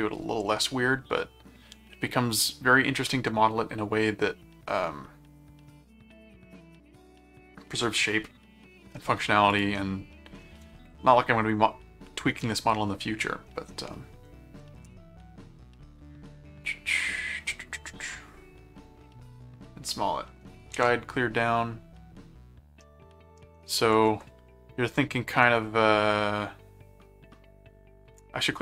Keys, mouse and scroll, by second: 9.5 click, 14.6-19.2 middle drag, 20.7 ctrl+Tab, 22.8 middle click, 23.9 ctrl+Tab, 25.3 ctrl+Tab.